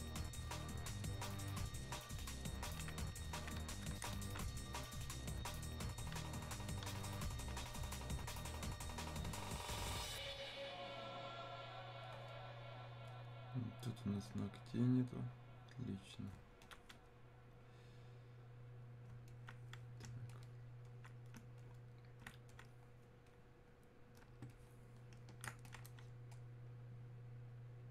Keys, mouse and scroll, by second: 4.3-14.7 alt+drag, 15.1-16.6 right drag, 16.6-21.6 alt+drag, 22.5-27.9 alt+drag.